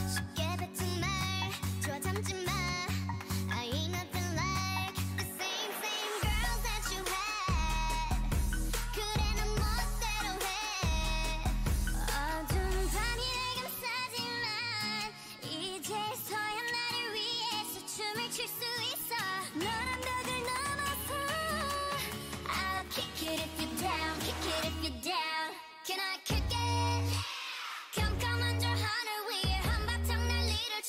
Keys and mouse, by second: 8.7 middle click, 9.7 Tab, 10.3 Tab, 12.6-14.6 drag, 13.9 u, 15.7 ctrl+i, 16.5 u, 17.5 n, 18.8 n, 19.4 click, 23.4 a, 23.7 l, 24.4 h, 25.5 middle click, 26.1 a, 26.9 ctrl+Tab, 27.9 typing, 28.2-30.1 right drag, 28.6-30.1 drag.